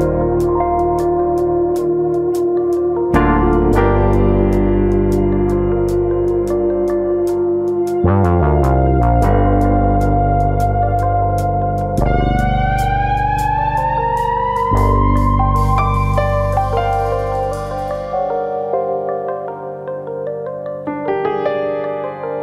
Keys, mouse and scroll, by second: 0.2 shift+middle click, 0.2 scroll up 2, 0.4 middle click, 0.7 shift+middle click, 1.7 click, 2.0 shift+middle click, 4.7 middle click, 5.1 middle click, 5.9 alt+click, 6.7 g, 8.1 click, 8.3 middle click, 8.8 middle click, 9.6 click, 9.9 middle click, 10.7 middle click, 11.4 g, 12.3 click, 12.6 click, 12.8 g, 13.7 click, 13.9-14.3 scroll down 1, 14.3 click, 14.5 g, 15.1 click, 15.3 shift+middle click, 15.9 click, 16.6 g, 17.5 click, 17.8 click, 18.0 g, 18.6 click, 18.9 middle click, 19.4 click, 19.8 g, 20.4 click, 20.6 click, 20.8 g, 21.5 click, 21.7 click, 21.9 g.